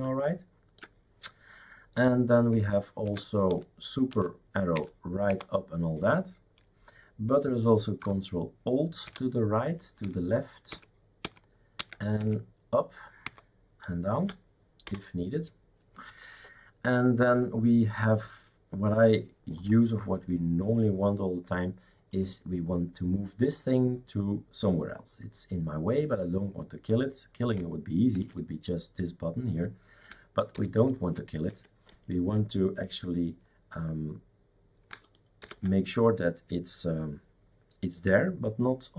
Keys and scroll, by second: 3.1 super+Right, 3.5 super+Left, 4.1 super+Right, 4.7 super+Up, 5.3 super+Down, 9.1 ctrl+alt+Right, 10.1 ctrl+alt+Left, 10.8 ctrl+alt+Left, 11.2 ctrl+alt+Left, 11.8 ctrl+alt+Right, 12.2 ctrl+alt+Up, 13.3 ctrl+alt+Down, 14.9 Escape, 28.1 shift+super+q, 30.5 ctrl+alt+Return, 35.4 ctrl+alt+t.